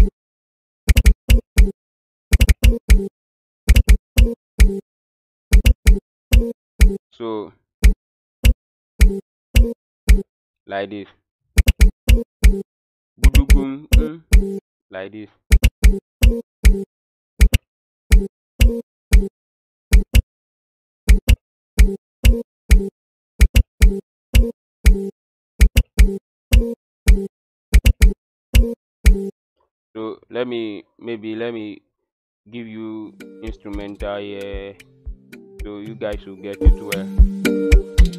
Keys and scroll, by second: 0.0-10.0 typing, 11.3-29.0 typing, 33.0 Escape, 33.3 Escape, 36.3 Tab, 36.6 o, 37.3 Tab.